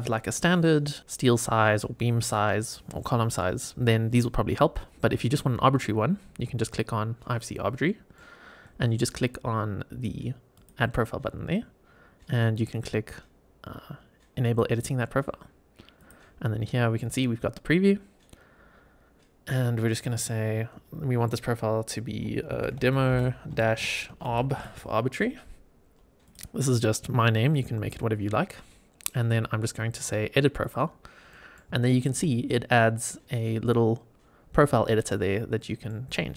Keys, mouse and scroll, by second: 7.8 middle click, 10.5 click, 14.3 click, 15.1 scroll down 2, 15.9 click, 19.8-26.2 drag, 30.5 click, 31.2 middle click, 31.7 shift+middle click, 32.2-32.6 scroll up 3, 32.7 middle click, 33.2-34.3 scroll up 3, 34.4 scroll down 1, 34.8 middle click, 35.5 middle click.